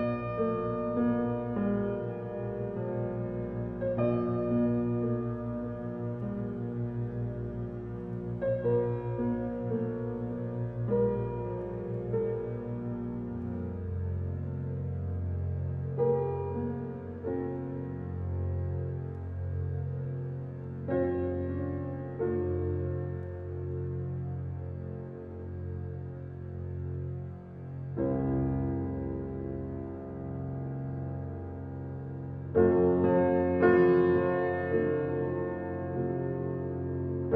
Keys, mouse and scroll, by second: 2.6 ctrl+alt+scroll down 1, 3.2 ctrl+alt+scroll down 1, 3.7 ctrl+alt+scroll up 1, 4.5-6.1 alt+right drag, 6.1-16.1 drag, 24.3 space, 24.6 click, 24.9 space, 25.6-28.3 drag, 28.3 ctrl+alt+scroll down 1, 29.4 alt+right click, 30.3-32.2 drag, 32.2 ctrl+alt+z, 36.8-37.3 alt+right drag.